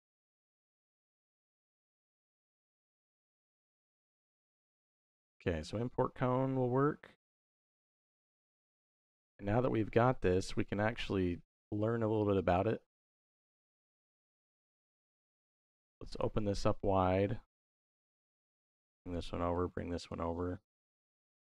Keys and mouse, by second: 3.8 click, 6.9-8.0 drag, 9.6 middle click, 11.6 middle click, 12.2 click, 13.1 x, 13.4 middle click, 14.1 middle click, 14.9-16.0 drag, 16.3 middle click, 17.7-19.0 drag, 19.4 click, 20.2 middle click.